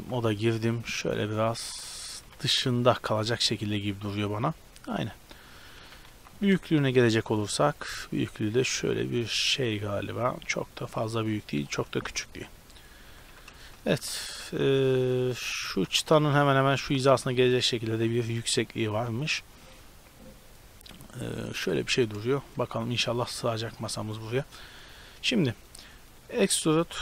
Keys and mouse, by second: 0.0 b, 1.0-2.9 drag, 2.3 a, 2.5 b, 3.3-4.3 drag, 5.8 a, 6.1 b, 8.0-9.8 drag, 10.3-12.4 drag, 12.4 z, 12.4 middle click, 13.0 click, 13.0 a, 13.4 a, 14.0 g, 15.6 click, 15.8 g, 17.1 g, 18.6 click, 19.5-20.8 middle drag, 20.8 click, 21.8-23.4 middle drag, 24.0-27.0 middle drag, 26.3 e.